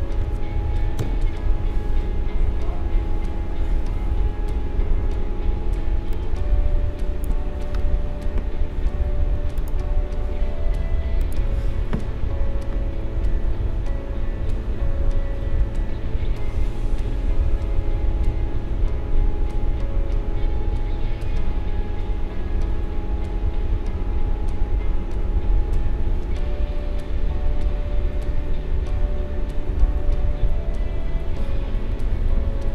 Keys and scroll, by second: 5.8 space.